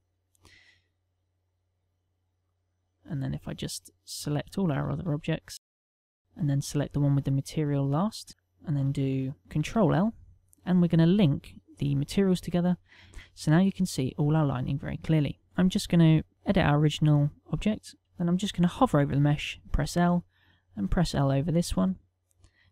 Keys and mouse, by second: 1.7 click, 4.2 click, 5.1 shift+click, 5.5 shift+click, 5.7 shift+click, 5.9 shift+click, 6.1 shift+click, 7.6 shift+click, 9.7 ctrl+l, 13.1 middle click, 16.1 click, 16.5 Tab, 17.9 click, 18.0 middle click, 18.0 a, 19.2 l, 20.8 l, 22.0 middle click.